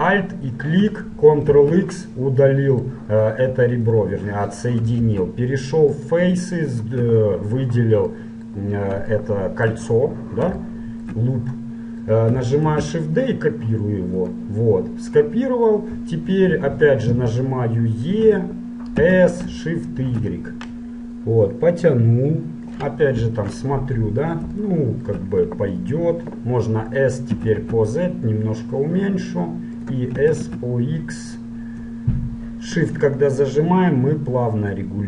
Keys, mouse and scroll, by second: 1.5 ctrl+x, 2.3-4.0 middle drag, 5.2 ctrl+Tab, 6.8-8.3 right drag, 8.3-13.4 middle drag, 12.8 shift+d, 17.6-19.2 middle drag, 18.3 e, 23.2 KP_1, 24.1-26.7 middle drag, 27.4 s, 30.3 s.